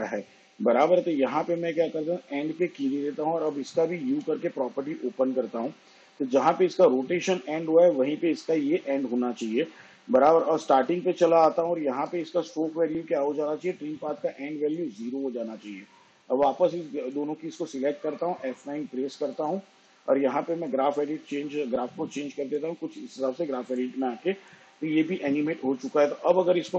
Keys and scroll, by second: 5.9 u, 19.9 F9.